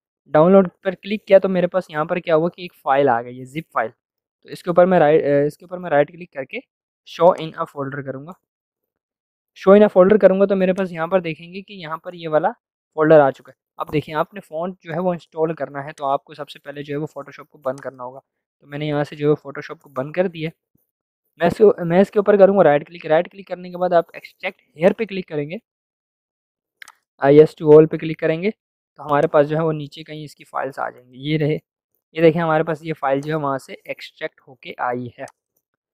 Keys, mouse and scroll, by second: 3.9 right click, 7.3 click, 10.7 click, 16.1 click, 21.1 right click, 24.8 click, 29.1-33.1 drag.